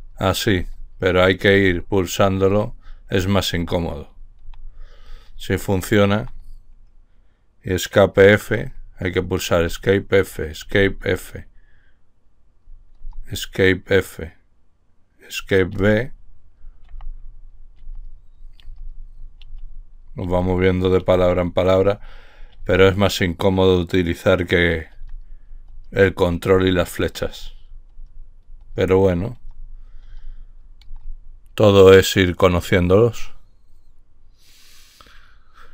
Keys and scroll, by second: 1.0 Escape, 2.1 Escape, 2.6-6.5 typing, 7.8-11.1 typing, 9.0 Escape, 12.2-13.2 typing, 14.8-22.9 typing, 24.4-31.2 typing, 28.3 Escape, 28.9 Escape.